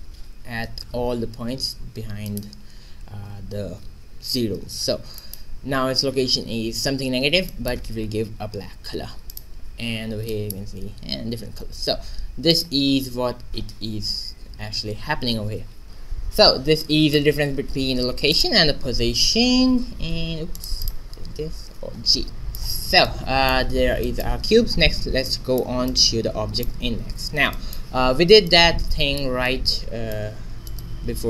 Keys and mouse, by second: 0.2 shift+z, 0.6 q, 1.0 g, 2.9 shift+z, 4.6 shift+z, 5.3 q, 6.3 q, 8.8 g, 9.8 shift+z, 9.9-12.3 drag, 10.8 g, 12.9-13.9 drag, 14.6 shift+z, 18.3-19.9 drag, 19.5 x, 20.0 click, 20.5 click, 20.6 right click, 20.6 x, 20.7 click, 21.7 alt+g, 22.2 alt+1, 28.4-30.6 drag, 30.6 middle click.